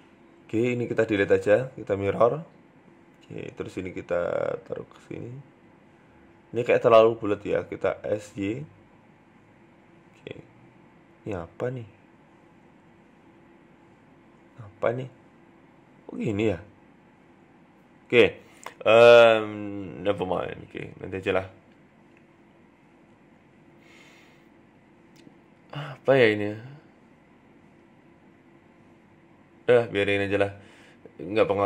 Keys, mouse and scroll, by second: 1.1 click, 1.5 shift+middle click, 2.9 shift+click, 3.9 g, 7.2 Tab, 7.8 s, 9.5 middle click, 9.8 scroll down 2, 10.0 middle click, 10.3 Tab, 10.5 middle click, 11.7 right click, 12.1 KP_1, 13.0-13.7 scroll up 1, 13.7 scroll up 2, 13.7 g, 14.3 middle click, 15.3 scroll down 2, 15.5 middle click, 17.5 Tab, 17.8 middle click, 18.9 scroll up 3, 19.1 Tab, 19.4 middle click, 19.7-20.2 scroll down 1, 20.2 right click, 20.2 scroll down 1, 20.4 middle click, 21.0 KP_1, 22.0 shift+middle click, 22.5 middle click, 24.2 right click, 26.3 ctrl+z, 26.5 middle click, 28.2-28.6 scroll down 2, 28.5 middle click, 29.9 KP_3, 30.3 shift+middle click, 30.7 scroll up 1, 31.0 click.